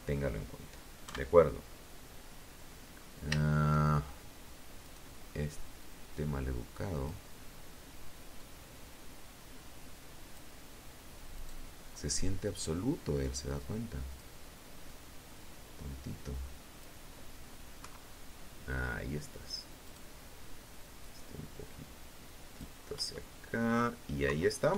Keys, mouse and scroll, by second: 3.0 right click, 3.9-5.4 drag, 6.5-8.7 drag, 9.5 right click, 11.7 click, 13.0-15.1 drag, 15.9 KP_3, 18.0 right click, 19.2-20.9 drag, 21.1 KP_1, 22.4 KP_3, 22.9 KP_1, 23.3-23.9 scroll down 1.